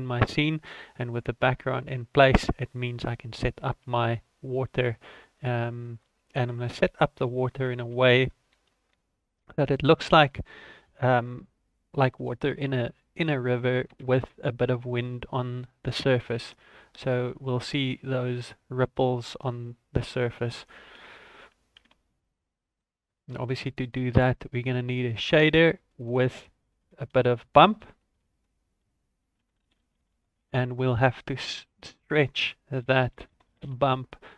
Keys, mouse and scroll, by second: 2.8 click, 3.9 shift+a, 7.2 s, 8.5 s, 9.8 s, 12.1 n, 13.1 click, 15.2 scroll up 1, 15.6 shift+middle click, 16.4 g, 17.9 s, 20.8 g, 21.7 ctrl+a, 23.1 scroll down 2, 23.3 shift+middle click, 23.7 scroll up 1, 25.2 click, 25.9 click, 26.0 click, 32.0 click, 32.2 click.